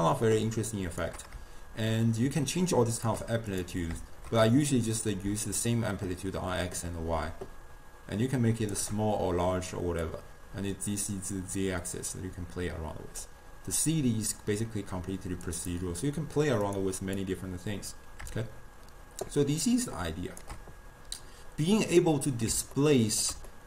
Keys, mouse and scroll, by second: 4.6-7.6 drag, 10.1-13.1 drag, 13.8-16.8 drag, 17.2-20.3 drag, 22.0 middle click, 22.6 scroll up 1, 22.8-23.6 ctrl+middle drag.